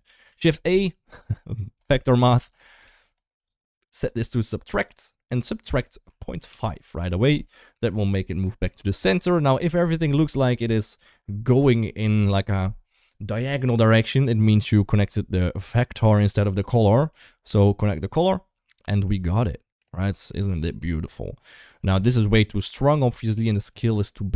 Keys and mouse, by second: 0.1 shift+a, 3.8-4.8 drag, 5.3-6.6 drag, 7.6 shift+middle drag, 7.9 middle click, 8.9-9.3 middle drag, 9.8 Up, 10.3 KP_1, 15.1 middle click, 16.9 middle click, 17.5 click, 17.7 click, 18.9-19.6 middle drag, 20.1 middle click, 20.7 shift+middle drag, 21.5 shift+middle click, 23.1 shift+middle click.